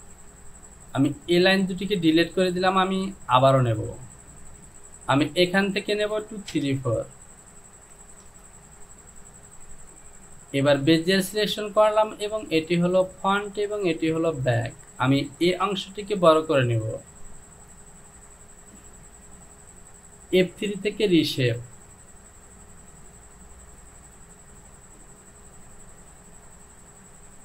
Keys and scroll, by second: 0.9 Delete, 6.7 Return, 15.8 Return.